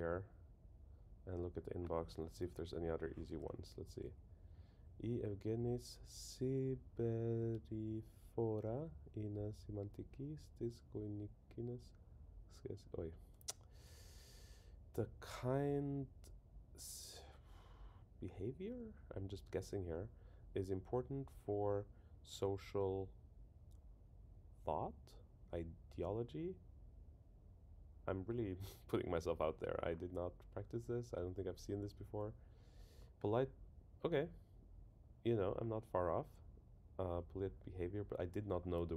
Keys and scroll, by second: 3.9 Up, 32.1 super+Down.